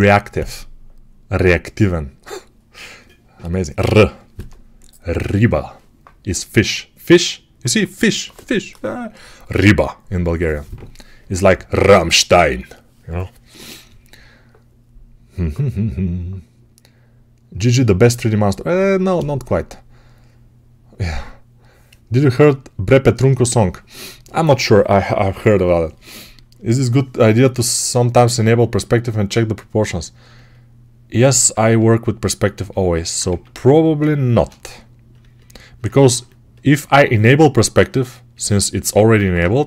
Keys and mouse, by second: 33.2 Tab, 33.5 alt+click, 33.8 right click, 33.9-35.0 shift+drag, 34.2 shift+d, 35.2-38.9 alt+middle drag, 39.5 g.